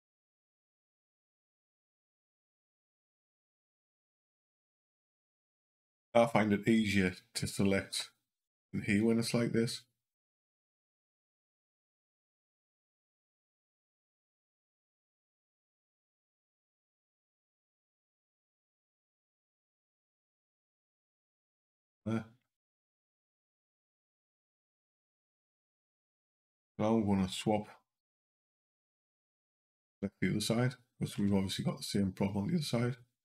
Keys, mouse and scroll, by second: 1.3 click, 4.7 click, 7.7 c, 12.8 click, 15.9 click, 17.6 Down, 17.7 click, 19.7 click, 22.3 Down, 23.1 Down, 23.5 Up, 24.9 click, 27.2 click, 31.0 c.